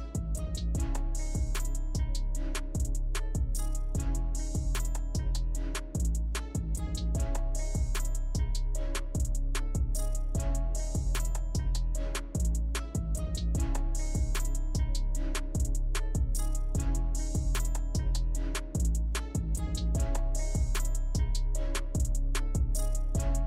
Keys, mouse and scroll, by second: 0.5-2.9 right drag, 2.9 KP_0, 10.8 click, 12.6-14.4 right drag, 14.4-22.2 drag, 22.2-22.7 scroll down 1, 22.7-23.4 middle drag.